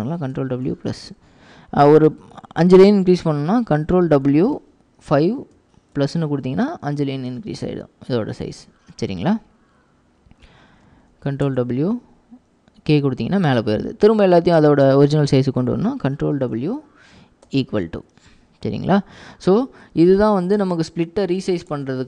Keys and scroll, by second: 0.0 ctrl+w, 4.4 ctrl+w, 5.2 5, 11.0 ctrl+w, 11.5 k, 16.3 ctrl+w, 17.6 =, 20.4 ctrl+w, 21.6 ctrl+w, 21.6 k.